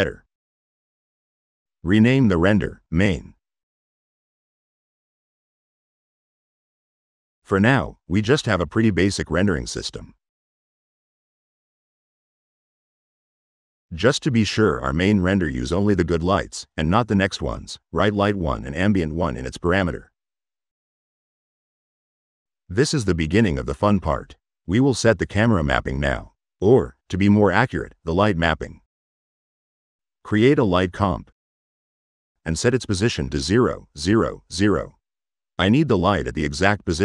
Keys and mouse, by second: 2.2 click, 7.4 middle click, 7.7 middle click, 7.9-8.9 drag, 9.8 click, 10.1 click, 10.3 click, 10.9-12.7 drag, 13.1-13.8 drag, 15.6 click, 17.3 click, 24.2 click, 27.7 middle click, 29.0 click, 30.7 click, 31.4 click, 33.4 click.